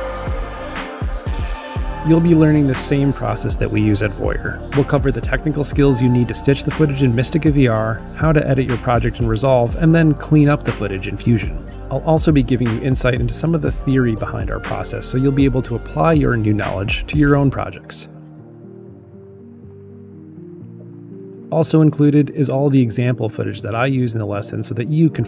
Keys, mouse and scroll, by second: 5.5-7.0 drag, 7.4 click, 8.4-9.0 drag, 9.5-9.9 drag.